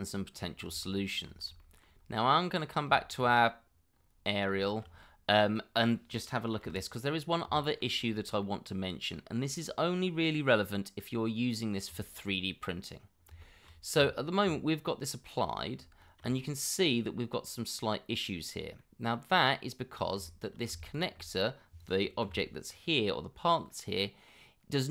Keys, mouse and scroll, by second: 1.6 shift+middle click, 2.0 scroll up 1, 3.1 shift+middle click, 3.9 scroll up 1, 4.6 shift+middle click, 5.0 scroll up 1, 6.6 /, 7.6 shift+middle click, 8.0-8.4 scroll up 1, 8.4 middle click, 12.0 shift+middle click, 12.4-13.1 scroll up 1, 13.4 shift+middle click, 14.0 Tab, 14.8 scroll up 1, 16.0 shift+middle click, 16.4 scroll up 1, 18.2 scroll down 1, 18.8 middle click, 19.5 scroll down 1, 20.2 shift+scroll down 1, 20.3 shift+middle click, 20.8 alt+click, 22.2 l, 22.9 scroll up 1, 23.7 middle click, 24.8 scroll up 1.